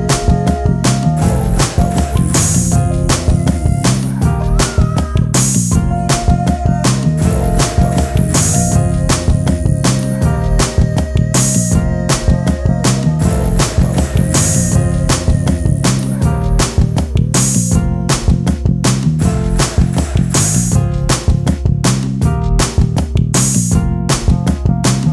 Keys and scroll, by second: 12.9 space, 15.1 ctrl+space, 19.6 space.